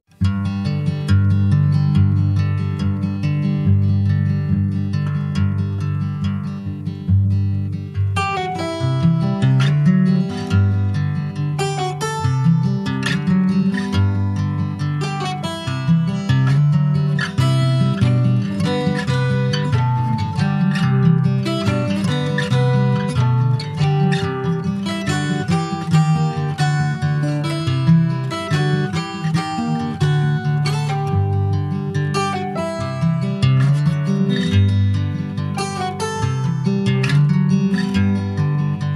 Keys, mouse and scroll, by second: 1.0 click, 1.3-2.0 scroll up 4, 2.0 shift+middle click, 2.1-2.6 shift+scroll up 1, 2.6-4.0 scroll down 11, 4.6-7.8 drag, 8.0-8.4 scroll up 4, 8.4 Tab, 9.1 Tab, 9.5 click, 10.4 Tab, 10.7 click, 12.1-14.6 drag, 15.5 click, 17.1-19.4 drag, 19.7 Tab, 20.7 click, 21.4 ctrl+s, 21.6 click, 22.2 Tab, 22.5 click, 22.7-25.0 right drag, 25.0 click, 25.5 ctrl+s, 25.6 click, 26.3 /, 27.1-27.8 scroll down 1, 27.8 /, 30.4 alt+h, 30.9-32.0 scroll down 21, 32.4 click, 33.8 ctrl+z, 34.1 click, 34.7 alt+z, 35.0 scroll up 2, 35.3 click, 35.7-36.5 scroll up 7, 36.5-38.4 middle drag, 38.4 click.